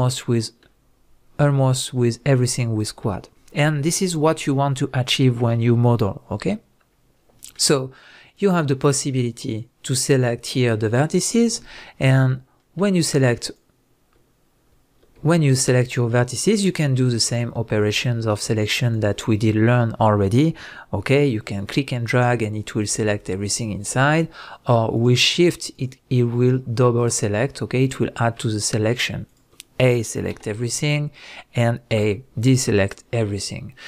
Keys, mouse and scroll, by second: 1.5 middle click, 5.6-8.3 middle drag, 8.3 click, 9.5 click, 10.1 drag, 10.8 click, 12.6-13.4 middle drag, 13.4 click, 15.6 shift+drag, 16.3 shift+click, 17.0 shift+click, 17.9 click, 18.8 shift+click, 21.6-25.0 drag, 25.7 shift+click, 26.4 shift+drag, 27.0 shift+drag, 27.8 click, 28.6 shift+click, 29.3 shift+click, 30.3 a.